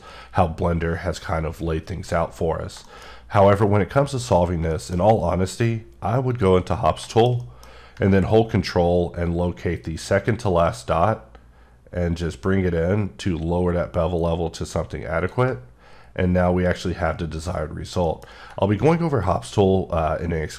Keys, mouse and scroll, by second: 2.5 scroll down 2, 2.8 middle click, 3.1-4.1 scroll up 1, 4.7 shift+middle click, 4.9-5.4 shift+scroll down 2, 6.3 click, 6.8 scroll down 3, 7.1 shift+middle click, 10.4 ctrl+click, 16.0-17.4 scroll up 3, 17.4-18.0 scroll down 4, 18.1 middle click.